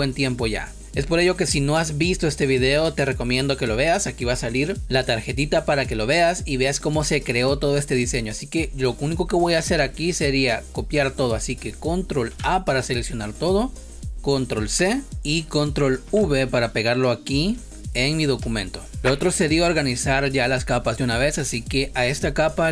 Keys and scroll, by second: 12.2 ctrl+a, 14.6 ctrl+c, 16.0 ctrl+v, 18.3 space.